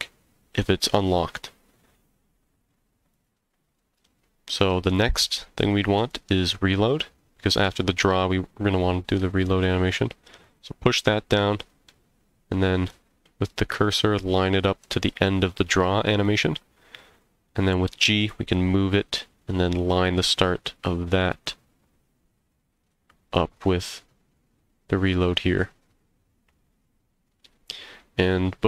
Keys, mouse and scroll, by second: 3.1-6.1 drag, 10.4 click, 11.1 middle click, 12.9 click, 13.6-14.4 drag, 16.2 click, 17.7 g, 22.7 click.